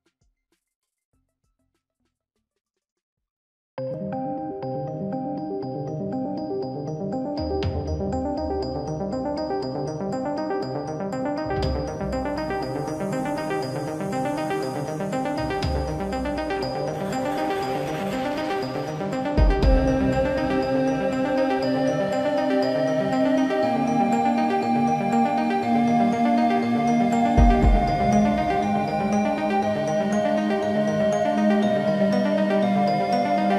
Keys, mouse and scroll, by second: 2.5 shift+middle click, 6.6 shift+middle click, 16.6 shift+middle click, 21.3 shift+middle click, 32.5 shift+middle click.